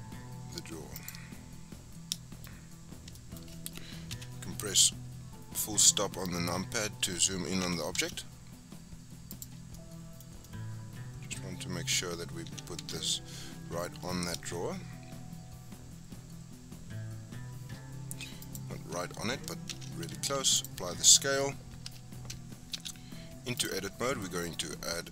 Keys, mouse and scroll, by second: 1.3-2.1 scroll up 7, 2.1 shift+middle click, 2.4-3.1 scroll up 8, 3.1 shift+middle click, 3.4 scroll up 1, 3.9 scroll up 1, 4.1 KP_Decimal, 4.7-5.3 scroll up 10, 5.5-6.6 scroll down 6, 6.6-7.6 scroll up 2, 7.6 g, 9.6 scroll down 4, 9.7-10.2 middle drag, 10.2 scroll down 3, 10.4-12.5 middle drag, 12.5 g, 19.7 ctrl+a, 21.8 Tab, 22.7 ctrl+r.